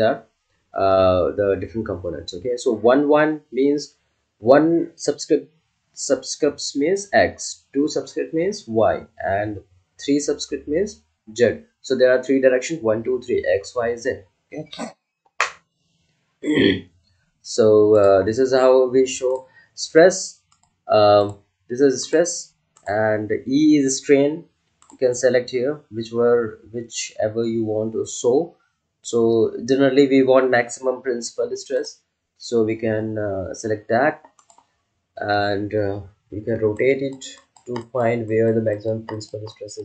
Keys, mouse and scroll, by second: 17.9 click, 31.7 click, 31.7 click, 34.3 click.